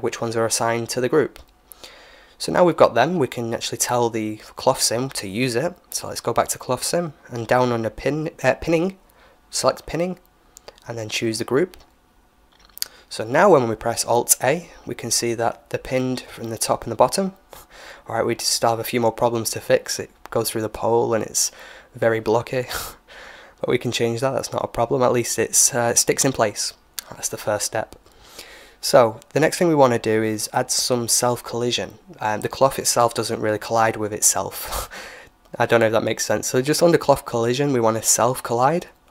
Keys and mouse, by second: 0.0-1.8 drag, 1.2 Tab, 3.8-5.7 drag, 7.3-9.2 drag, 8.1-11.2 middle drag, 9.4-11.3 drag, 13.1-15.0 middle drag, 14.1 alt+a, 20.1-23.0 middle drag, 23.9-26.6 drag, 26.6-29.7 middle drag, 30.5-32.4 drag, 33.7-35.6 drag, 34.5-36.9 middle drag, 35.9-37.9 drag, 37.9 alt+a.